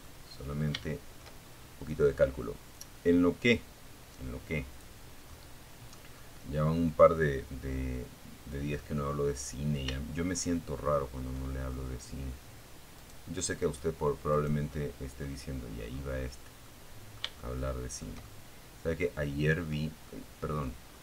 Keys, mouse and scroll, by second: 0.9-3.2 drag, 3.5 middle click, 4.4-7.1 middle drag, 7.2-7.7 scroll up 1, 8.6 shift+middle click, 11.1 right click, 11.8 right click, 12.5 right click, 12.9 middle click, 13.4 scroll up 1, 13.8-14.3 scroll down 3, 14.8 middle click, 15.7 shift+middle click, 16.6-18.0 shift+middle drag, 18.2 middle click, 19.0-19.6 scroll up 2, 19.6-21.0 middle drag.